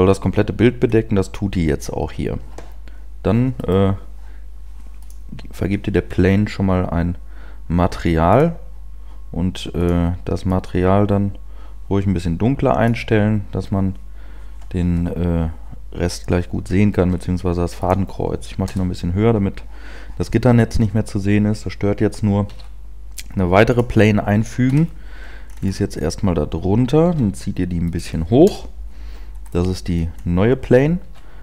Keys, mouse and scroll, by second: 0.7-1.4 scroll down 1, 0.7 KP_0, 1.4 scroll down 1, 1.6-2.0 scroll up 1, 4.0 right click, 5.0 click, 8.2 click, 10.0 click, 14.8 KP_1, 17.2 g, 18.0 click, 18.6 KP_0, 22.6 shift+a, 24.6 KP_1, 25.5-25.9 scroll up 5, 27.0 g, 28.0 click, 28.4 KP_0, 29.5 scroll down 2, 30.1 scroll up 2, 31.0 s.